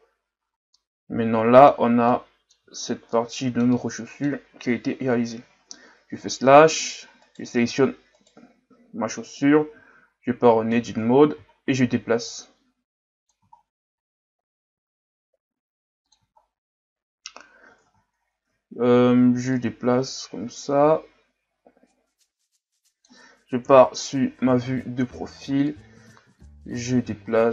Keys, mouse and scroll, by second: 0.3-0.7 scroll down 2, 0.7-2.8 middle drag, 2.8 shift+scroll down 4, 3.1-5.0 middle drag, 5.0 KP_Divide, 6.2 scroll up 7, 7.3 right click, 8.2 shift+right click, 9.1 KP_1, 9.8 Tab, 10.4 a, 10.7 a, 11.0-11.6 scroll down 3, 12.2 g, 13.6-13.9 shift+scroll down 6, 13.9-14.6 scroll up 4, 14.7 s, 16.4-17.1 shift+scroll down 2, 18.2-18.5 shift+scroll down 6, 18.5-19.5 ctrl+scroll up 3, 19.5 click, 23.7 KP_3, 24.5-25.2 ctrl+scroll down 5, 25.7 click.